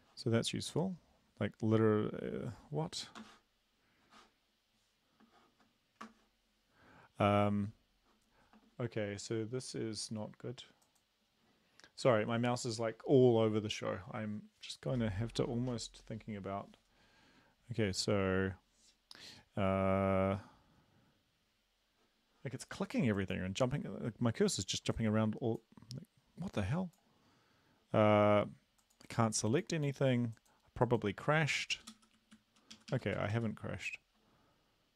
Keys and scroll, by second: 20.0 Down, 20.1 Down, 32.1 End, 32.2 Down, 32.3 Down, 32.7 Up, 32.9 Up, 33.1 Down, 33.3 Down.